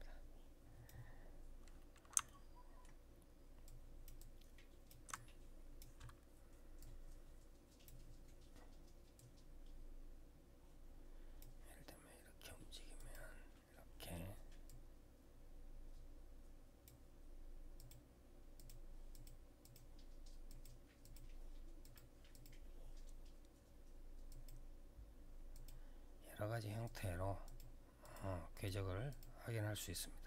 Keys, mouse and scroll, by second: 1.3-1.9 scroll down 3, 2.0 alt+middle click, 2.8 alt+scroll down 1, 3.4 alt+click, 3.9 alt+click, 4.9 click, 6.5 click, 8.9 click, 12.7 click, 14.4 click, 17.5 click, 18.3 click, 18.9 click, 19.4 click, 19.5 double click, 20.2 double click, 20.8 double click, 20.9 double click, 21.6 double click, 22.1 double click, 22.2 double click, 24.0 click, 25.3 click, 26.6 click, 26.7 click, 27.2 click, 27.8 click, 27.9 click, 28.3 click, 28.4 double click, 28.8 double click.